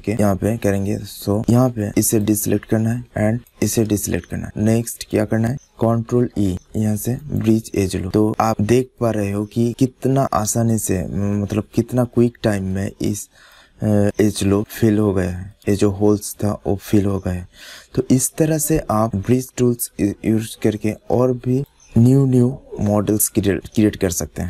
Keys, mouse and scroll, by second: 0.1 middle click, 1.0 click, 1.1 middle click, 1.3 middle click, 1.7 middle click, 1.9 click, 2.2 middle click, 2.6 click, 2.7 middle click, 2.8 click, 2.9-5.2 middle drag, 6.0 ctrl+e, 8.0-9.3 middle drag, 9.4 middle click, 9.9 middle click, 10.3 middle click, 11.2 middle click, 11.4 middle click, 11.6 middle click, 12.5 middle click, 13.3-14.6 middle drag, 14.7 middle click, 14.8 middle click, 15.4 middle click, 16.6 middle click, 17.6-18.7 middle drag, 19.0 middle click, 19.7 middle click, 20.9 middle click, 21.9 middle click, 22.5 middle click, 24.0 middle click.